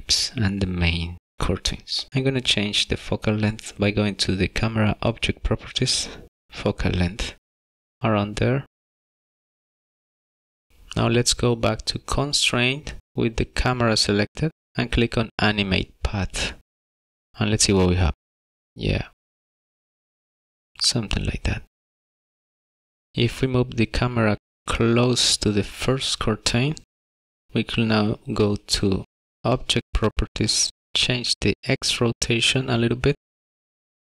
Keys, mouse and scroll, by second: 1.3 click, 5.8 space, 7.5 space, 9.3 click, 12.8 click, 14.8 click, 16.8 click, 16.8 space, 18.1 click, 31.5 click.